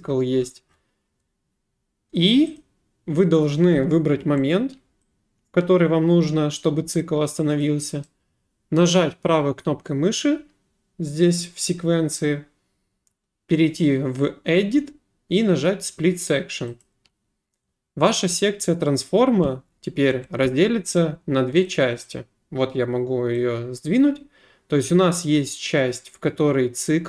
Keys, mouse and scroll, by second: 2.6 click, 7.0 click, 7.6 click, 8.0 right click, 16.8 click, 21.7 click, 23.4 click.